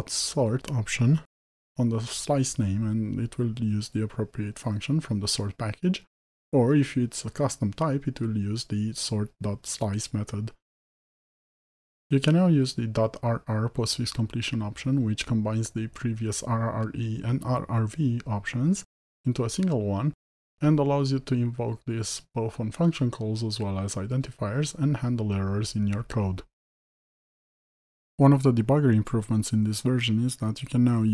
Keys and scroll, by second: 3.3 ctrl+v, 14.7 Return, 22.9 Return.